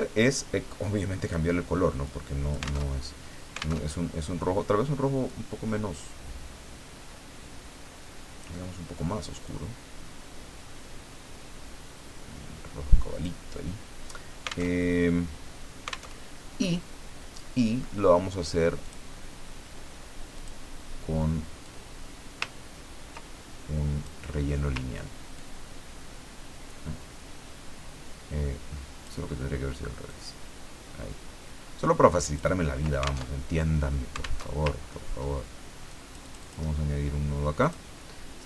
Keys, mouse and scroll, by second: 1.2 click, 2.0 click, 2.8 alt+Tab, 3.8 alt+Tab, 5.3-8.6 drag, 9.4-13.4 drag, 14.7 alt+Tab, 16.1 alt+Tab, 18.8 click, 20.4 click, 21.6-24.3 drag, 25.3-29.3 ctrl+drag, 30.0-32.6 ctrl+drag, 33.2 ctrl+alt+Tab, 34.4 alt+Tab, 34.8 ctrl+alt+scroll up 3, 35.9 click, 37.6 click.